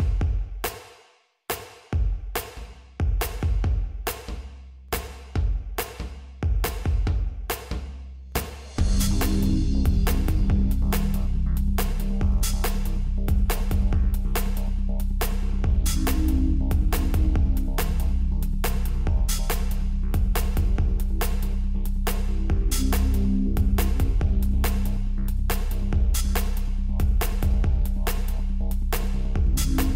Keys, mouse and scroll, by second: 2.0 shift+a, 20.4 g, 26.8 click, 27.6 KP_7, 29.8 KP_5.